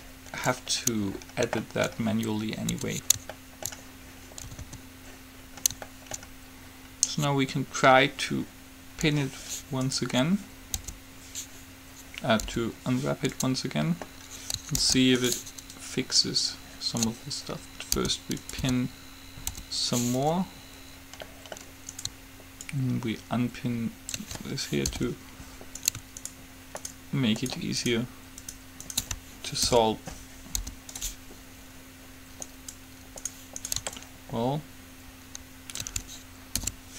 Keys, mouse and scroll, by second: 3.0 Tab, 4.7 a, 4.8 a, 9.9-12.0 right drag, 11.0 u, 12.6 u, 15.0 ctrl+z, 15.5 right click, 18.2 p, 18.9 p, 19.0-20.5 right drag, 19.7 u, 21.2-22.4 middle drag, 22.1-24.7 right drag, 23.0-24.0 drag, 25.1 alt+p, 26.0-30.0 right drag, 30.0 alt+p, 30.9 u, 36.8 alt+p.